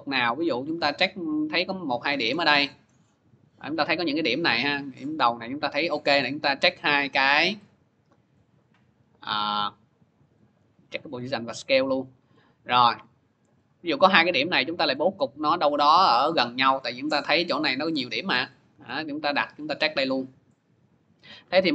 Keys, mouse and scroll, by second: 0.9 scroll, 2.2 scroll, 2.7 scroll, 3.6 scroll, 4.2-4.6 scroll, 4.8-6.6 scroll, 8.6 click, 9.0 scroll, 10.1 click, 11.0 click, 12.4-13.0 scroll, 13.8 scroll, 16.6 click, 18.2 click, 18.7 scroll, 21.1 click.